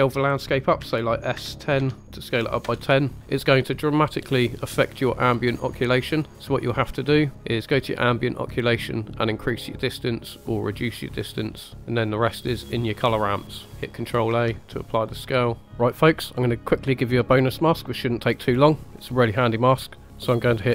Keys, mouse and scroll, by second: 0.8 s, 1.3 1, 1.7 0, 2.6 Return, 2.8-3.6 scroll down 6, 3.6-4.1 middle drag, 4.2 scroll up 2, 5.6-6.4 scroll down 3, 6.3 middle click, 6.3 scroll up 4, 6.4 scroll down 1, 6.7-7.4 scroll up 4, 8.1 click, 12.0 scroll down 1, 12.8 scroll down 3, 13.2 middle click, 13.7 scroll down 1, 14.3 ctrl+a, 15.6 middle click, 19.2 middle click, 20.0 click.